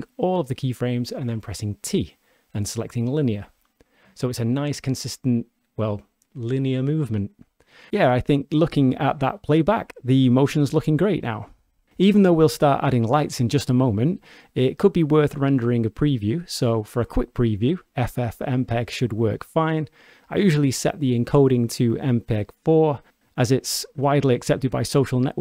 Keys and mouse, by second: 0.0 click, 2.2 t, 6.5 shift+space, 10.8-12.6 shift+middle drag, 19.0 click, 23.1 click, 25.1-25.4 drag.